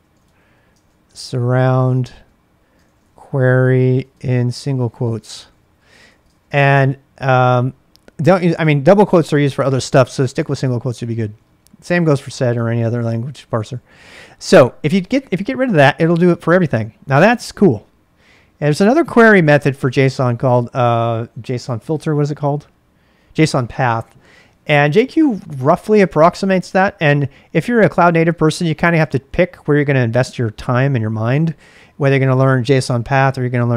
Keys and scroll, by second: 0.0-8.2 typing, 10.0 ctrl+[, 10.7 ctrl+a, 10.9 ctrl+a, 12.0-14.9 typing, 15.9 Return.